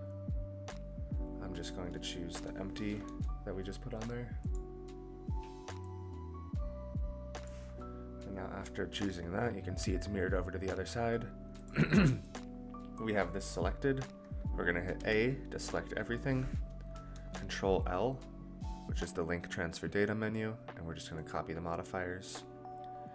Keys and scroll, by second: 17.1 ctrl+l.